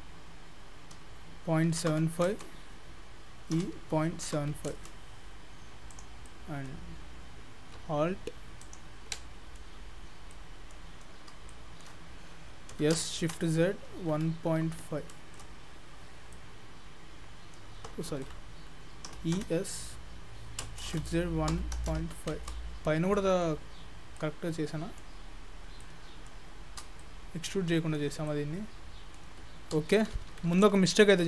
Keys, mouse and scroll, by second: 3.6 e, 5.9 click, 6.3 middle click, 8.6 alt+click, 9.2 alt+middle click, 10.0-10.4 scroll down 3, 10.3 middle click, 11.0-11.5 scroll up 2, 11.5 shift+middle click, 12.7 s, 16.3 middle click, 18.1 ctrl+z, 19.1 e, 22.9 scroll down 2, 23.2 middle click, 23.9-24.2 scroll up 2, 24.2 middle click, 25.4 scroll up 1, 25.6 scroll down 2, 25.9 middle click, 26.5-27.0 scroll up 2, 27.0 shift+middle click, 28.3 middle click, 30.0 ctrl+z, 30.2 ctrl+z.